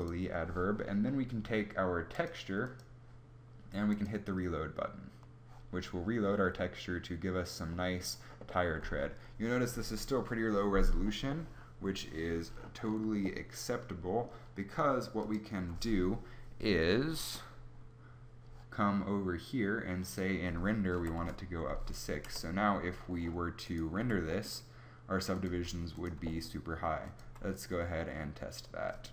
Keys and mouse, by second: 2.5-8.0 middle drag, 22.2 KP_0, 23.6 click, 23.9 g, 25.4 g, 26.1 g, 27.1 g.